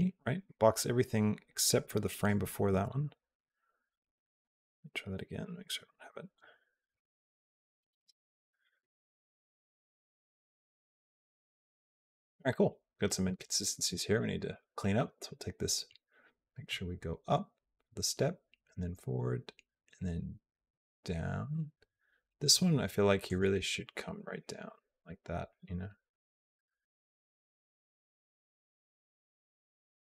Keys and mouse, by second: 4.3 p, 7.8 space, 14.4 space, 15.7-22.3 drag, 23.1 click, 23.4 g, 25.3-30.1 drag.